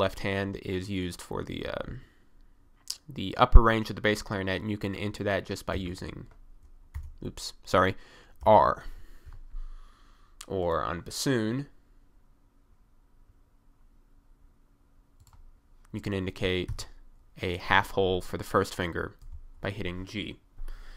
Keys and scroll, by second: 5.7 g, 7.0 BackSpace, 8.5 r, 16.7 1, 19.3 g.